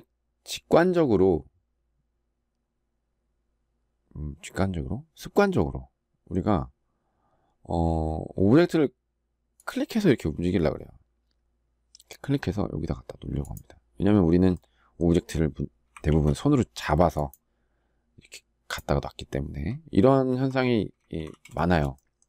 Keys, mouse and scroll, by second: 15.8 ctrl+z, 20.9 ctrl+z.